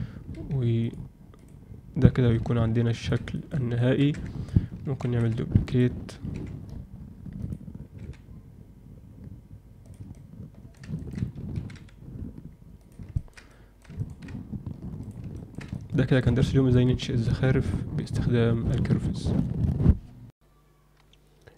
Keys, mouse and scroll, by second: 0.3 g, 1.3 click, 2.3 z, 2.9 ctrl+alt+middle click, 3.3 alt+shift+middle click, 3.7 ctrl+alt+middle click, 4.1 Tab, 5.0 shift+d, 6.3 r, 7.9 g, 10.1-10.8 alt+middle drag, 10.9 ctrl+alt+middle click, 13.1 ctrl+middle drag, 13.4-13.8 alt+middle drag, 13.9 ctrl+alt+middle drag, 15.0 click, 15.3 ctrl+middle click, 15.7-16.1 alt+shift+middle drag, 16.4 ctrl+middle drag, 17.2-18.6 ctrl+alt+middle drag, 20.3 ctrl+F8.